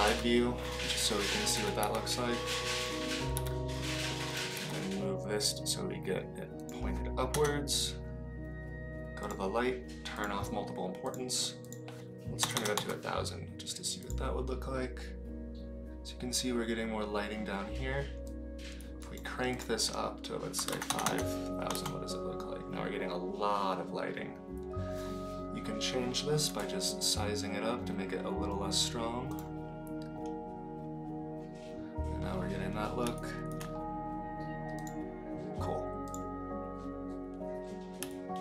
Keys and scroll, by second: 0.0 KP_Decimal, 1.6 g, 3.3 r, 4.5 g, 7.3 KP_0, 12.5 KP_0, 20.9 KP_0, 21.0 KP_0, 26.4 s.